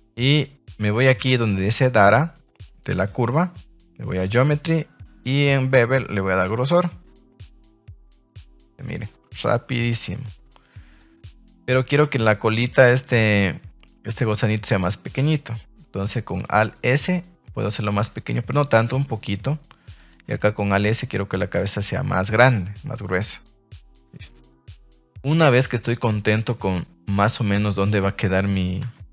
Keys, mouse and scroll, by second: 2.4 click, 4.1 click, 6.1-8.2 drag, 8.5 a, 9.1-10.4 middle drag, 10.6 middle click, 11.4 right click, 11.7 middle click, 12.0 Tab, 12.5 right click, 16.4 alt+s, 19.1 click, 19.9 right click, 20.2 alt+s, 21.3 click, 21.5 Tab, 21.8-22.1 middle drag, 22.2 a, 22.3 a, 22.6-23.1 middle drag, 23.4-24.4 middle drag, 24.8-25.3 middle drag, 25.5 shift+middle drag, 26.0-26.6 middle drag, 27.0-27.5 middle drag, 27.9 middle click, 28.8 Tab.